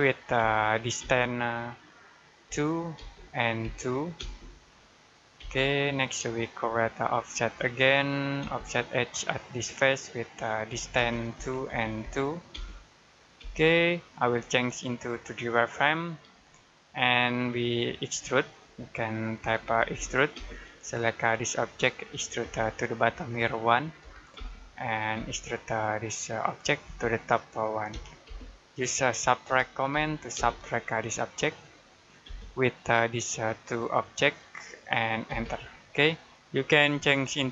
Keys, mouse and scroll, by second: 0.2 d, 0.8 space, 2.3 2, 2.8 space, 4.0 space, 5.6-6.1 scroll down 1, 6.4 shift+middle click, 7.5 scroll up 1, 8.3 space, 9.2 click, 10.6-12.4 typing, 14.7 click, 16.4 shift+middle click, 18.2 middle click, 19.3-20.2 typing, 20.5-21.7 scroll up 1, 21.7 click, 22.3 space, 23.9 1, 24.2 space, 26.2 click, 26.7 space, 27.8 1, 28.1 space, 29.3-30.2 typing, 31.5 click, 32.1 space, 33.3 click, 35.1 space, 35.6 scroll down 1.